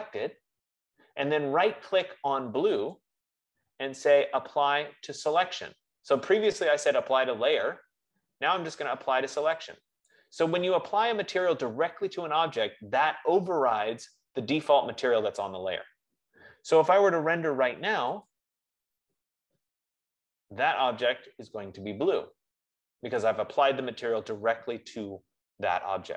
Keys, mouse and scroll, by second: 3.9-8.8 right drag, 10.9-15.8 drag, 18.5-23.6 drag, 25.1 F15.